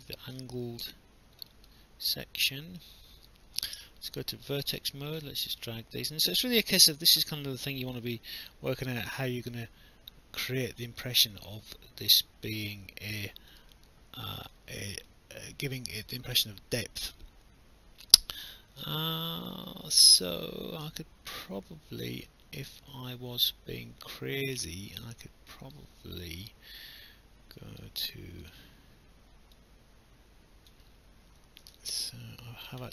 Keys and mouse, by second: 0.6 alt+click, 1.5 alt+middle click, 3.3 right click, 4.8 click, 6.0 click, 9.1 alt+click, 10.1 click, 11.2 click, 13.7 alt+click, 15.1 alt+click, 25.7 right click, 28.4 click, 29.6 click, 31.5 ctrl+z, 32.1 alt+click.